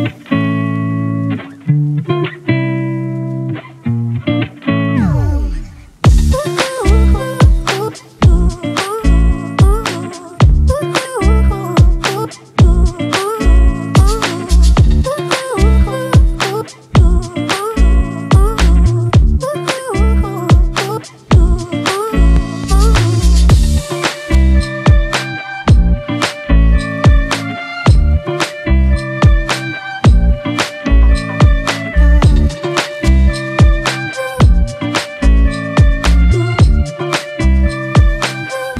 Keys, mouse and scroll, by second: 1.2 ctrl+t, 9.4 Return.